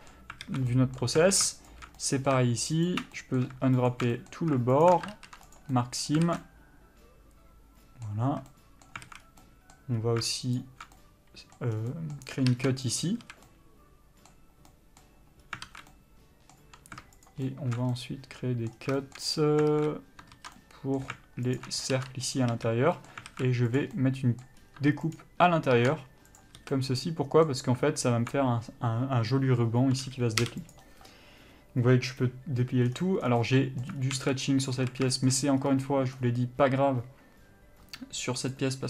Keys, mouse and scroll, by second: 0.0 middle click, 0.6 alt+a, 0.9 middle click, 1.9 alt+shift+click, 2.2 middle click, 3.1 alt+shift+click, 3.4 middle click, 4.1 alt+shift+click, 4.3 middle click, 5.1 alt+shift+click, 5.8 ctrl+e, 5.9 middle click, 6.4 alt+a, 6.6 middle click, 8.5 a, 8.7 middle click, 9.3 alt+a, 9.4 scroll up 1, 9.6 middle click, 10.2-10.8 scroll up 1, 10.8 alt+shift+click, 11.2 middle click, 11.9 scroll down 1, 12.1 middle click, 13.2 ctrl+e, 13.4 a, 13.7 middle click, 15.6 scroll up 1, 15.8 alt+a, 16.1 middle click, 17.5 alt+shift+click, 18.1 middle click, 19.0 scroll down 1, 19.2 shift+middle click, 19.5-19.9 scroll up 1, 19.9 alt+a, 20.6 ctrl+z, 20.8 middle click, 21.8 alt+shift+click, 22.6 ctrl+e, 22.7 a, 23.1 middle click, 23.5 alt+a, 23.9 click, 24.2 middle click, 24.8-25.4 scroll up 1, 25.4 ctrl+click, 26.6 ctrl+e, 26.8 a, 26.9 middle click, 30.9 u, 33.1-33.4 scroll down 1, 33.6 middle click, 34.1 alt+scroll up 1, 34.3 alt+a, 35.0 a, 35.3 shift+middle click, 35.8 scroll up 1, 38.7 click.